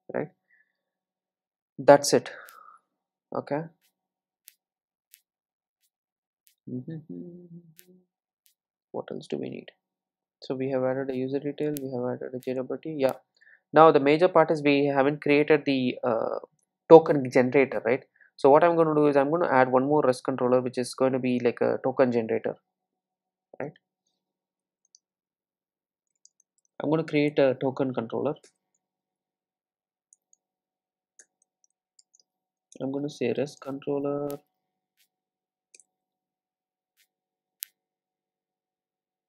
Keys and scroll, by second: 30.0 super+e.